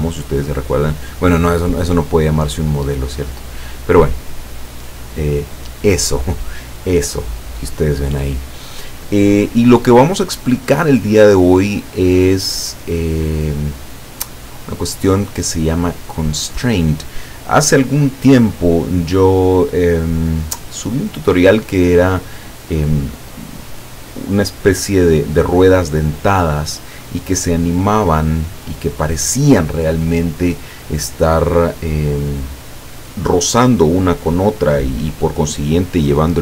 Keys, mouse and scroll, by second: 0.3-4.6 drag, 7.4-15.9 drag.